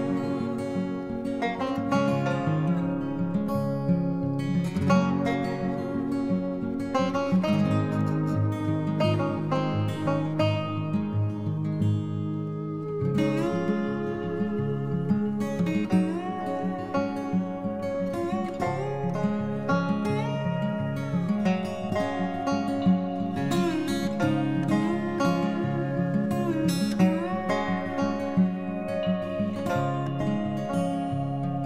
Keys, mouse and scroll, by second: 5.2 q, 6.4 Right, 11.5 m, 16.4 F2, 31.1 typing.